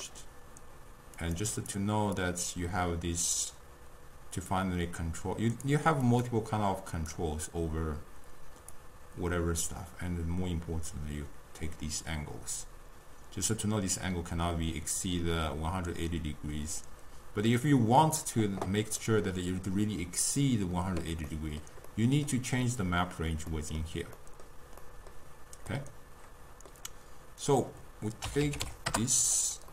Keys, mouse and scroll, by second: 1.2-5.2 drag, 6.2-11.8 drag, 19.1-27.5 middle drag, 27.5-29.7 drag.